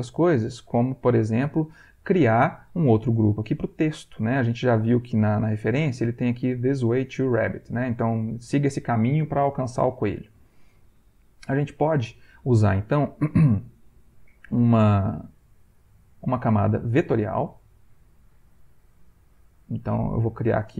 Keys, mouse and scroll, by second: 0.5 click, 5.6 click, 10.4 click, 15.6 click, 18.7-19.9 drag.